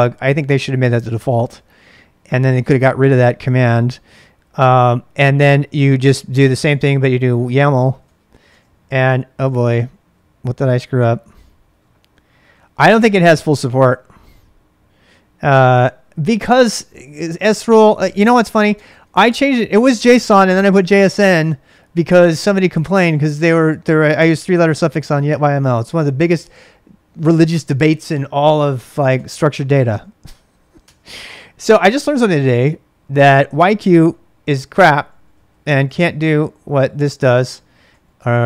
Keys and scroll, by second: 1.3 ctrl+[, 1.6-2.2 typing, 4.0-11.4 typing, 17.1 ctrl+c, 17.3-19.1 typing, 28.9 ctrl+[, 29.1 k, 29.8 k, 30.8 Return, 31.5-35.8 typing, 36.1 Return, 37.1-38.4 typing.